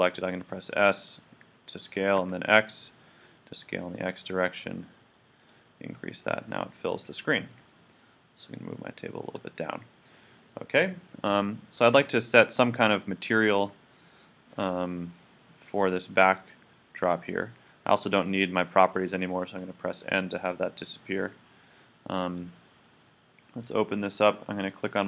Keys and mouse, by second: 0.5 s, 5.5-7.6 drag, 7.8-8.8 middle drag, 19.6 n, 22.3-24.2 drag.